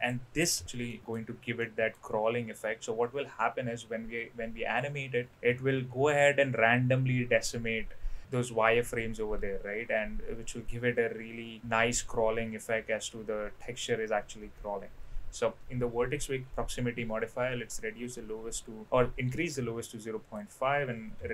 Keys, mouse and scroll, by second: 0.0 click, 0.9 middle drag, 1.7 middle click, 15.6-19.8 drag, 20.3-21.3 drag.